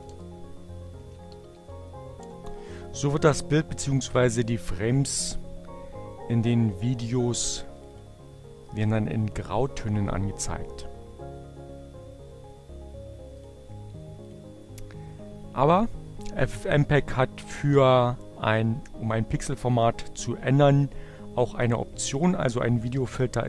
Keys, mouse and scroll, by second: 0.0-1.4 typing, 1.9 Return, 4.2 click, 7.6 click, 12.8 click, 13.8 click.